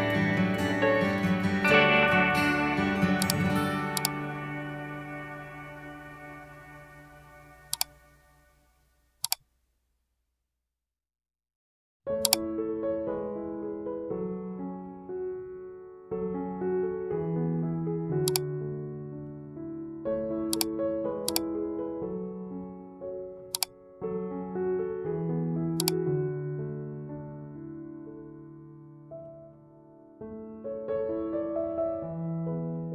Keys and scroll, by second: 28.3 ctrl+0, 31.2 ctrl+j.